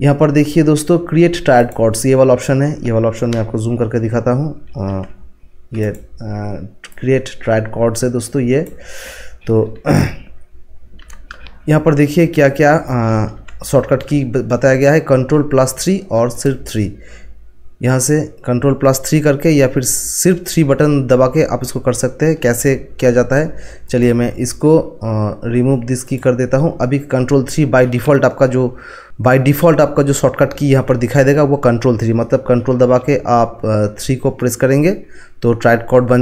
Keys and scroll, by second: 4.9 ctrl+1, 13.4 ctrl+1, 22.5 ctrl+1.